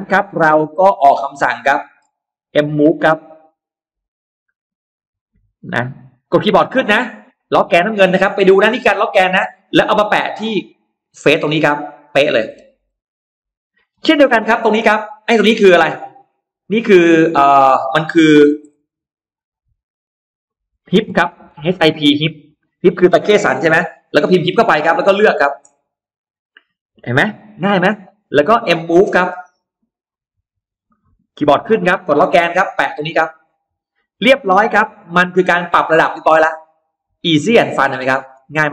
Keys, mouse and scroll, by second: 0.0-1.1 scroll up 5, 0.8 middle click, 2.4-2.7 scroll up 1, 2.9 scroll up 1, 3.2 m, 3.9 click, 6.2 middle click, 6.7 middle click, 7.1 Up, 10.2-10.8 scroll up 2, 11.9 click, 12.3-13.0 scroll down 2, 13.7 scroll down 2, 14.1 middle click, 14.8 space, 15.0 click, 17.3 click, 18.2 BackSpace, 18.5 BackSpace, 21.0 h, 21.3 i, 22.2 p, 26.2 shift+click, 28.4 middle click, 28.5-29.9 scroll up 5, 30.0 m, 30.6 click, 31.4 Up, 32.1 middle click, 33.4 click, 33.8 middle click, 34.2 space, 34.4 click, 34.6-35.0 scroll up 1, 34.7 middle click, 35.0-36.0 scroll down 1, 36.0-38.1 middle drag, 37.4-37.7 scroll down 1, 38.3-38.7 scroll up 4.